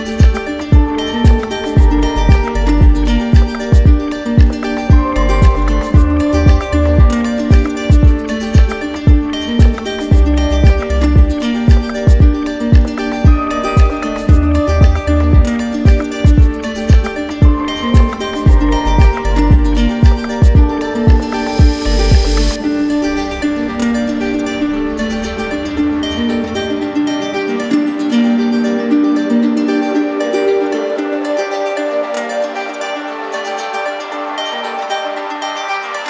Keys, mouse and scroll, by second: 0.6 alt+click, 1.0 alt+click, 1.7 d, 2.0 d, 3.7 shift+click, 4.5 shift+click, 5.3 shift+click, 6.7 click, 7.2 click, 8.0 shift+click, 8.2 shift+click, 9.3 ctrl+z, 9.9 d, 11.1 shift+click, 11.8 shift+click, 12.5 shift+click, 13.3 click, 14.3 shift+click, 15.0 click, 15.7 shift+click, 16.9 click, 17.7 alt+click, 18.8 click, 19.7 click, 20.4 alt+click, 21.1 alt+click, 21.6 click, 23.7 d, 23.9 d, 24.0 d, 25.4 click, 25.8 shift+click, 28.3 click, 29.0 click, 30.4 click, 32.0 click, 32.7 shift+click, 33.9 click, 34.9 click.